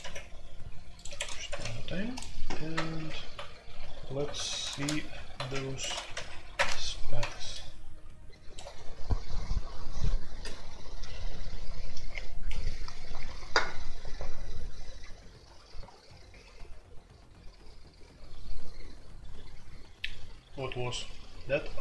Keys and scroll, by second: 1.0 Escape, 1.4 ctrl+c, 2.9 alt+o, 4.3 ctrl+g, 4.3-6.5 typing, 6.1 alt+p, 6.5 Return.